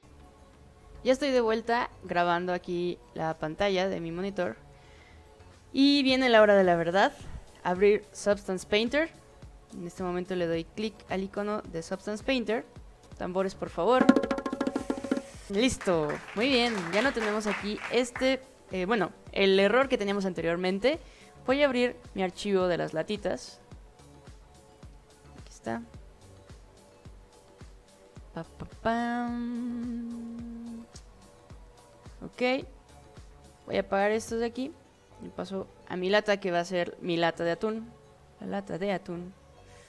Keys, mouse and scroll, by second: 10.5 click, 21.6 click, 25.4 click, 31.2-31.5 scroll down 1, 31.5-33.1 scroll up 6, 34.1 click, 34.6 click, 35.2 click, 36.5 scroll up 2, 36.7-37.6 scroll down 2, 37.8 alt+click, 39.4 drag.